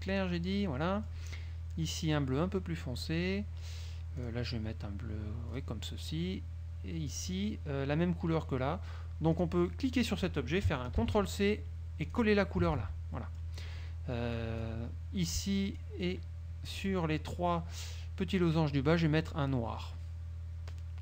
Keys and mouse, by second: 0.2 click, 1.0 click, 2.0 click, 3.1 click, 4.3 click, 5.7 click, 7.2 click, 9.5 click, 11.2 ctrl+c, 12.2 click, 13.3 ctrl+v, 13.3 ctrl+click, 14.5 click, 15.9 shift+click.